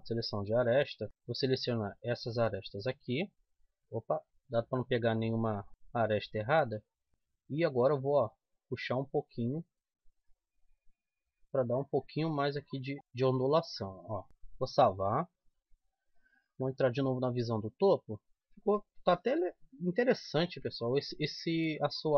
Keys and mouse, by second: 0.7 middle click, 3.3 c, 3.9 middle click, 5.5-7.5 right drag, 8.2-9.7 drag, 9.7 middle click, 13.0 click, 14.3-16.0 middle drag, 16.0 KP_7, 16.5 Tab, 18.2 z, 18.3 Tab, 19.4 KP_7, 20.4 middle click.